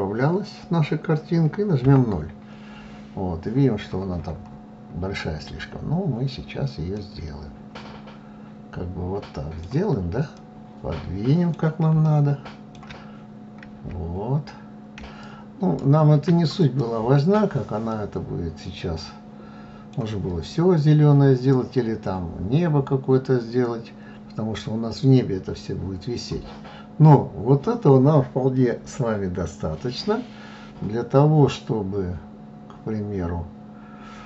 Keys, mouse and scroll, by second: 0.3 KP_0, 1.9-3.2 scroll down 16, 3.7-4.9 scroll up 5, 4.9 scroll down 3, 5.8-11.7 middle drag, 11.7-12.7 scroll up 2, 12.7-14.4 scroll down 2, 14.4 shift+click, 16.6-19.9 middle drag, 19.9-20.6 scroll down 2, 20.6-21.8 scroll up 3, 21.8 scroll down 2, 22.5-27.4 scroll up 1.